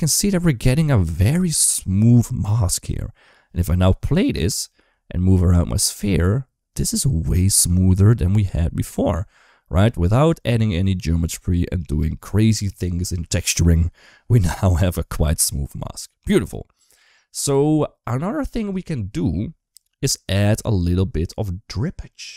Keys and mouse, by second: 2.4 click, 2.8 shift+middle click, 4.2 space, 4.7 g, 11.8 space, 16.2 click, 17.3 shift+middle click, 21.9 middle click.